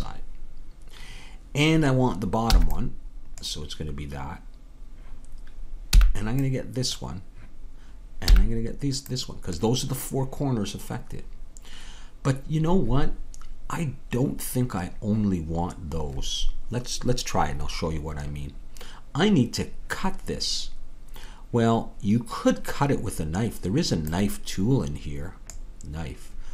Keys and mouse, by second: 2.5 b, 6.0 b, 24.5-26.5 drag.